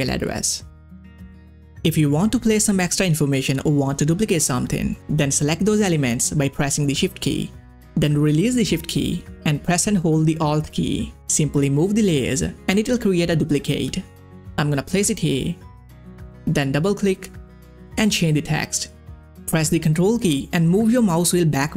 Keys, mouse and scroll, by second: 0.0-2.6 typing, 3.3 click, 9.4 shift+click, 9.5-14.5 alt+drag, 15.6 click, 17.8 w, 18.0 w, 18.1 w, 19.9 click, 20.5 ctrl+scroll down 1.